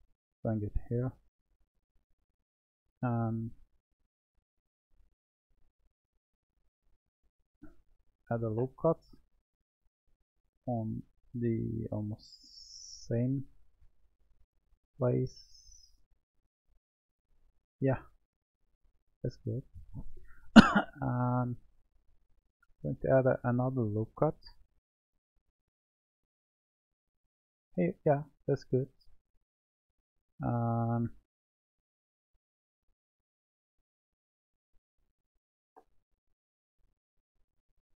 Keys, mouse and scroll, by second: 0.8-1.9 middle drag, 1.9 Tab, 9.4 click, 11.3 click, 12.7-15.8 drag, 27.9-29.0 drag, 29.0-32.9 middle drag, 32.9 click, 34.6 click, 36.8 click.